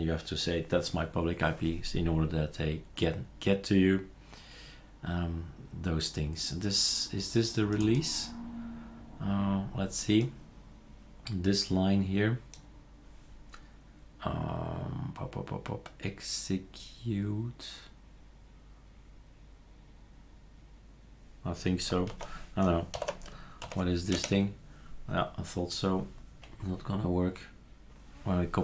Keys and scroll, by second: 22.1 ctrl+c, 23.0 ctrl+alt+t, 23.6 ctrl+shift+v, 24.1 Return.